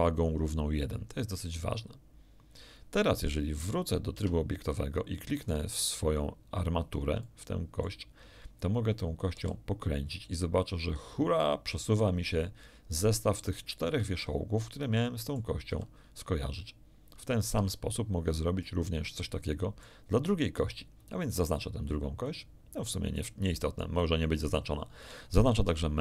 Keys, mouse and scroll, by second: 4.1 Tab, 5.4 click, 6.5-6.8 scroll down 1, 7.2 shift+click, 9.3 r, 13.8 Escape, 14.1 click, 14.7 middle click, 15.7 r, 17.5 Escape, 18.6-20.0 middle drag, 21.3 right click, 23.1-24.7 middle drag, 25.0 right click, 25.6 Tab.